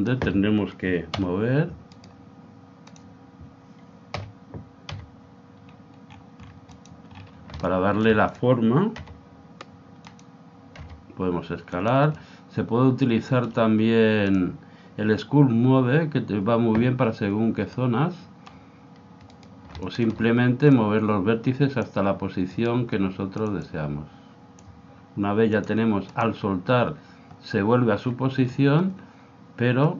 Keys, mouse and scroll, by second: 1.2 o, 2.0-4.2 right drag, 2.9 click, 4.2 o, 4.9 g, 7.1-8.3 middle drag, 8.3 click, 8.3 right click, 9.4 g, 10.8 s, 12.1-14.2 middle drag, 14.2 click, 17.7 middle click, 19.3-21.6 right drag, 20.7 click, 22.5-24.2 right drag, 23.4-27.3 drag, 28.0-29.9 middle drag.